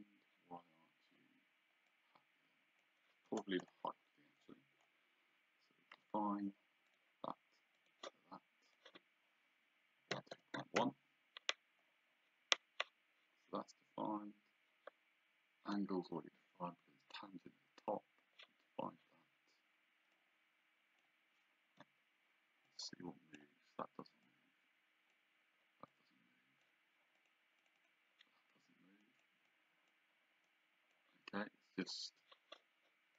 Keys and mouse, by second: 2.0 click, 3.2 Escape, 6.0 d, 6.9 click, 10.2 KP_2, 10.6 KP_1, 10.9 KP_Enter, 20.2 click, 22.1 Escape, 22.7 click, 24.3 click, 25.9 click, 27.2 click, 29.1 click.